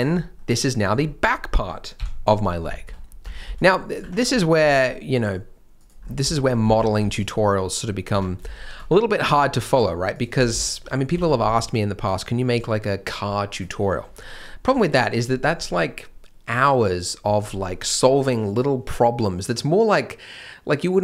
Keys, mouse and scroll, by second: 0.1 scroll down 1, 0.3 middle click, 2.4 scroll up 1, 2.7 shift+middle click, 3.0 scroll up 1, 3.3 alt+a, 3.4 c, 4.2-4.5 scroll down 1, 4.5 g, 6.0 scroll up 1, 6.3 shift+m, 6.6 alt+a, 7.0 c, 8.5 shift+m, 8.7-9.1 scroll up 1, 9.2 g, 10.3 scroll down 1, 10.6 shift+m, 11.2 alt+a, 11.4 b.